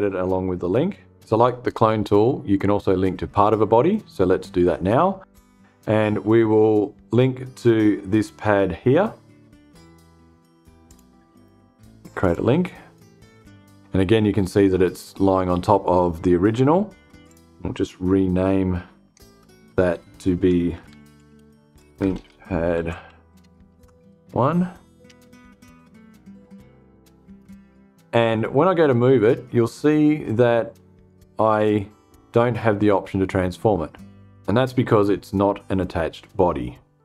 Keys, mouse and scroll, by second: 10.3 click, 11.7 click, 16.7 click, 18.6 F2, 20.1-23.5 typing, 24.5 Return, 26.7 click.